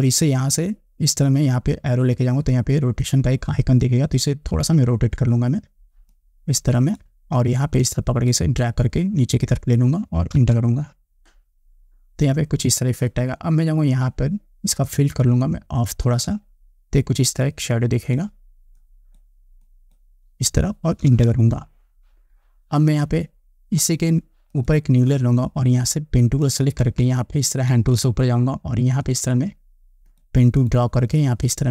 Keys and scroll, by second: 10.6 Return, 21.3 Return, 27.3 space.